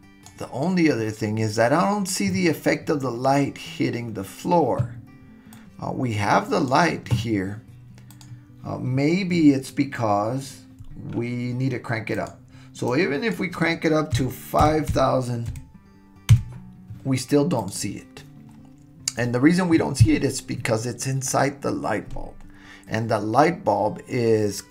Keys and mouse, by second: 5.5-6.7 drag, 12.1-16.9 drag, 14.9 KP_0.